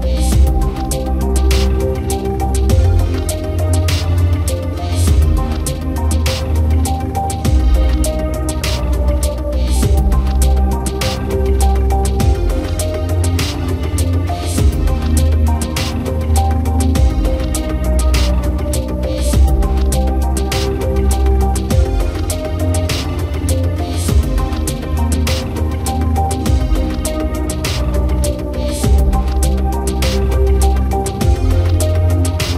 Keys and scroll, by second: 4.2 Return.